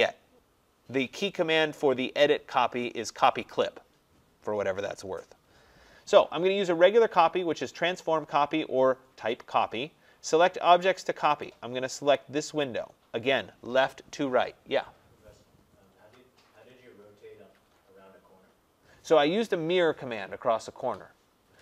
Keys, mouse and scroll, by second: 12.2 click.